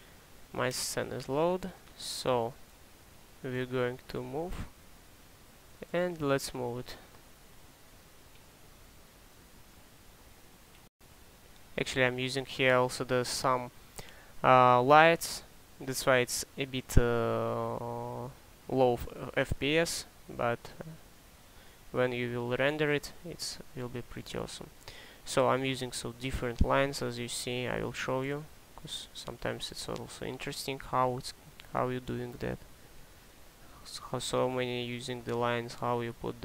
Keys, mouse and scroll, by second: 0.0-0.4 typing, 3.0-3.8 typing.